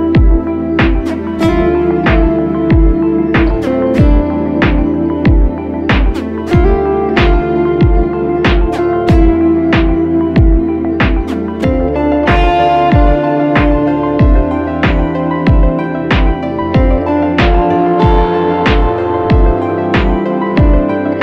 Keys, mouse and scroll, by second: 2.6 double click, 5.7 ctrl+d, 14.0 alt+right click, 17.3 double click.